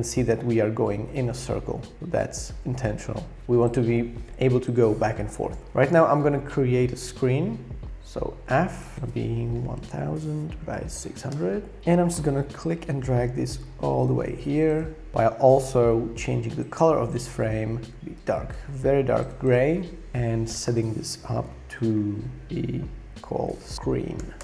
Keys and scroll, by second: 8.1 f, 9.5-11.5 typing, 23.3-24.4 typing.